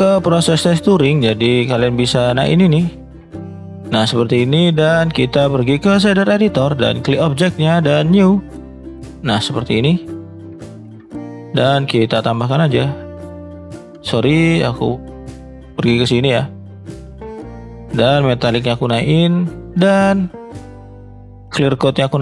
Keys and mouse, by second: 3.2-4.8 drag, 5.9-19.3 drag.